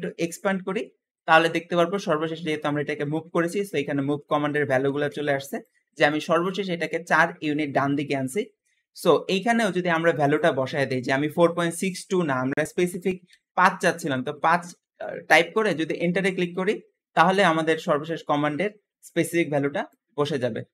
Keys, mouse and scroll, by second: 0.1-3.1 drag, 10.1-13.3 drag, 20.4-20.7 scroll down 2.